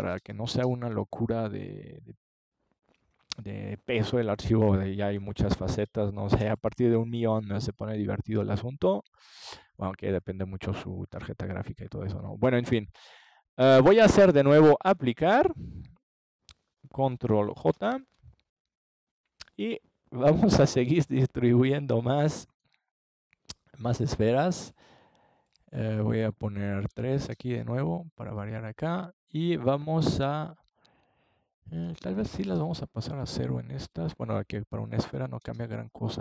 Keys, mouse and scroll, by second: 2.1-4.1 middle drag, 4.9-7.0 drag, 7.0-8.5 scroll up 1, 8.5-10.3 middle drag, 12.1 click, 12.5-13.8 middle drag, 14.9 click, 15.0-16.1 middle drag, 16.1-17.9 drag, 18.5-20.9 middle drag, 22.1 KP_3, 22.6 KP_1, 24.6 r, 29.3-31.2 middle drag.